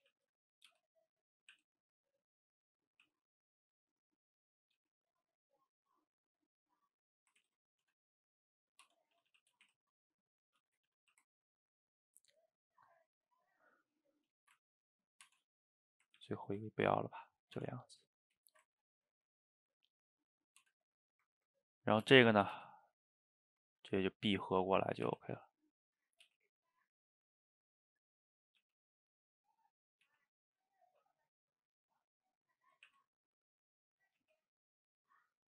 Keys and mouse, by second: 0.1 shift+z, 0.7 g, 3.1 e, 4.5 click, 4.8 g, 6.0 click, 6.5 click, 6.9 middle click, 7.4 ctrl+z, 7.9 Tab, 8.4 middle click, 8.9 Tab, 9.2 a, 9.3 a, 9.7 shift+z, 10.3 middle click, 10.6 Tab, 10.9 a, 11.1 a, 11.3-14.4 ctrl+middle drag, 14.4 shift+right click, 14.7-15.0 ctrl+middle drag, 15.0 click, 15.3 Tab, 15.9 click, 16.2 ctrl+x, 16.7-17.6 middle drag, 17.6 Tab, 18.0-18.6 middle drag, 18.6 shift+right click, 18.8-20.6 ctrl+middle drag, 20.6 Tab, 21.0-21.7 middle drag, 21.7 click, 22.2 shift+click, 22.5 g, 24.7 click, 25.1 r, 26.3 g, 28.4 click, 28.6 g, 29.9 click, 30.1 g, 30.8 click, 30.9 g, 32.7 click, 32.9 e.